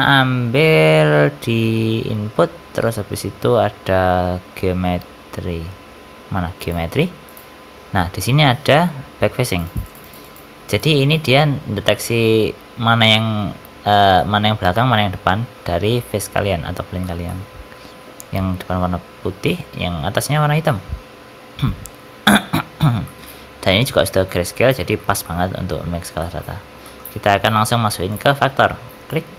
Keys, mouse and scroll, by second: 0.1 shift+a, 7.5-9.4 scroll up 7, 7.9 middle click, 9.4-11.0 ctrl+shift+click, 11.8 middle click, 13.7 Tab, 14.0 middle click, 16.9 shift+middle click, 17.2 middle click, 19.3 middle click, 19.5 shift+middle click, 20.5 shift+middle click, 21.0-22.4 scroll down 2, 22.9 middle click, 24.6 scroll up 2, 24.9 shift+middle click, 25.1 middle click, 26.1 middle click, 26.4 scroll down 3, 26.7 middle click, 27.0-27.5 scroll up 2, 27.7 scroll up 1, 28.0 click, 29.2 middle click.